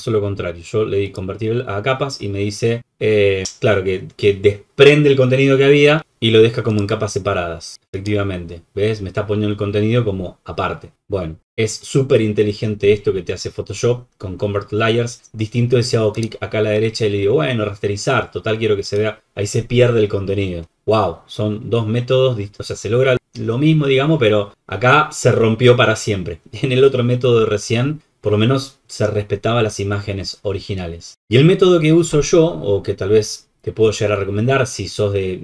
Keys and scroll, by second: 10.9 ctrl+z.